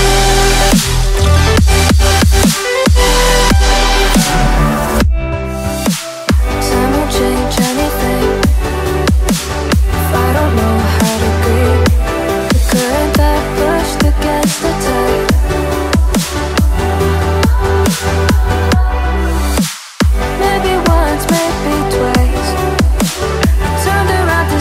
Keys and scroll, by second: 6.4 alt+a.